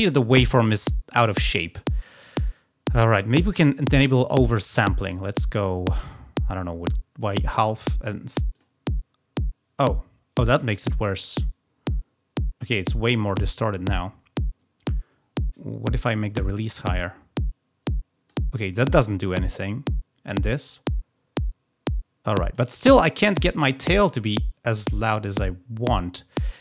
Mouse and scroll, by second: 4.4 click, 8.5 click, 15.8-18.2 drag, 20.2-22.5 drag.